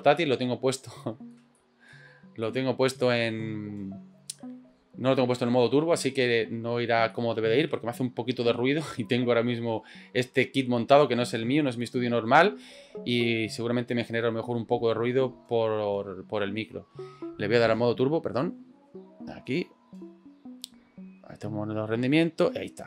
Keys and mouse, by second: 0.4 middle click, 1.0 shift+middle click, 1.5 middle click, 2.4 middle click, 7.2 shift+middle click.